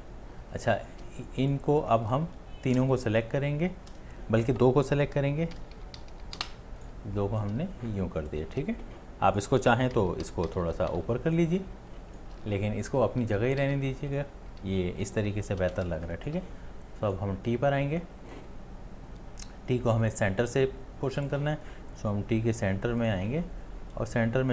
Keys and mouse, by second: 0.4 space, 0.9 click, 2.7 space, 3.0 shift+click, 5.5 Down, 5.8 Down, 6.0 Down, 6.1 Down, 6.4 Down, 7.6 space, 8.1 click, 8.2 click, 8.3 space, 9.9 Up, 10.2 Up, 10.5 Up, 10.6 Up, 10.9 Up, 11.6 space, 12.1 click, 12.2 click, 12.2 space, 12.9 ctrl+z, 13.2 ctrl+z, 13.6 ctrl+z, 14.6 ctrl+z, 15.2 space.